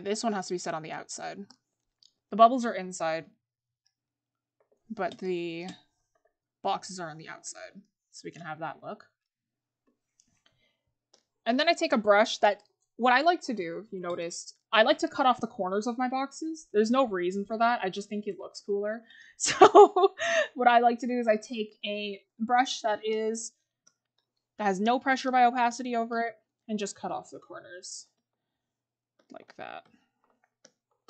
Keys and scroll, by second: 30.9 scroll.